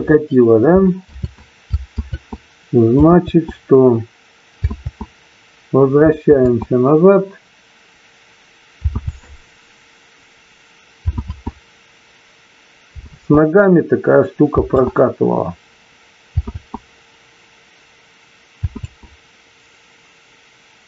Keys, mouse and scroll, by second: 2.4 ctrl+z, 4.2 ctrl+z, 8.1 ctrl+z, 10.4 ctrl+z.